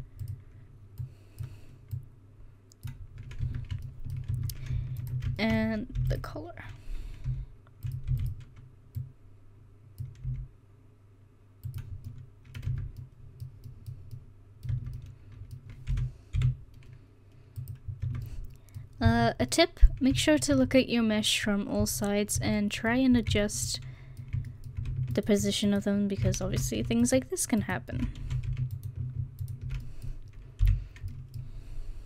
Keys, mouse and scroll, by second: 1.0-2.9 drag, 3.4 Tab, 4.3 Tab, 6.0 e, 7.3 s, 8.1 e, 10.3 s, 12.4 middle click, 12.7 Tab, 14.7 Tab, 15.9 s, 18.0 Tab, 22.4 Tab, 26.5 ctrl+z, 28.2 ctrl+z, 30.6 o.